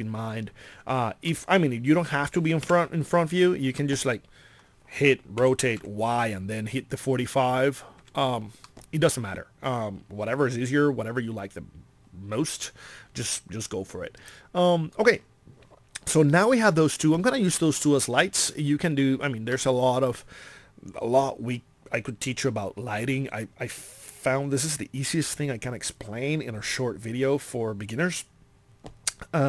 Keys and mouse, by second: 1.6 middle click, 2.6 KP_1, 5.4 r, 8.6 middle click, 17.6 middle click.